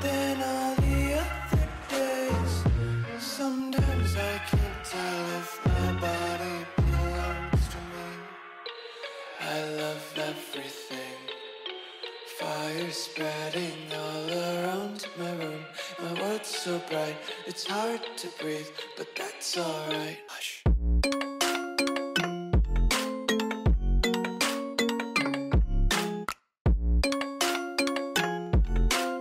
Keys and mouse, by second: 0.6 z, 0.9 z, 1.8 shift+h, 4.8 z, 5.0 z, 6.4 z, 6.6 z, 7.9 a, 8.1 a, 8.7 k, 10.2 a, 10.6 k, 12.1 k, 14.1-16.1 typing, 15.4 Delete, 16.4 ctrl+z, 17.0 ctrl+z, 18.0 z, 18.3 a, 18.4 b, 19.7 Delete, 20.7 ctrl+z, 21.8 a, 22.0 b, 22.7 Delete, 23.0 a, 23.1 a, 23.4 Tab, 23.7-24.5 a, 26.2-28.6 typing, 27.7 click, 28.0 Tab, 28.2 Tab.